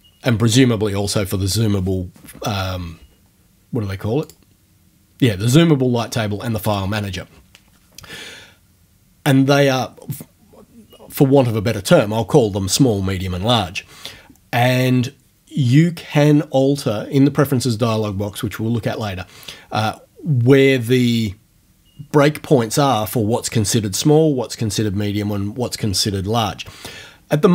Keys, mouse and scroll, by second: 4.3 click, 6.7 click.